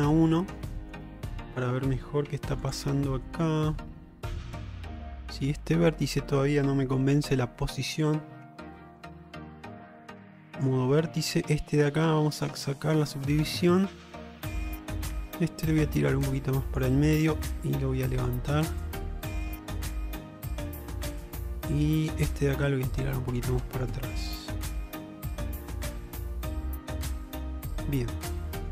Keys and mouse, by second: 0.2 middle click, 0.8 shift+middle drag, 1.1 middle click, 2.3 q, 3.3-5.8 middle drag, 7.5 1, 8.8 ctrl+z, 9.1 Tab, 10.1 1, 11.1 middle click, 12.4 click, 13.0-15.0 middle drag, 15.9 click, 17.7 click, 18.6-21.4 middle drag, 22.7-23.9 drag, 24.4-28.7 middle drag.